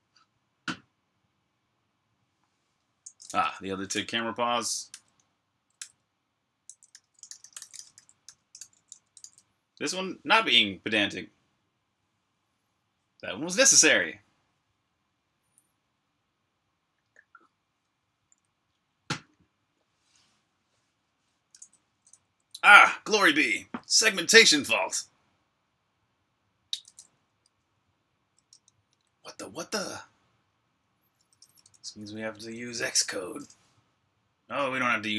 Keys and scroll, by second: 3.8-10.6 typing, 28.3 super+Tab, 31.1 super+Tab.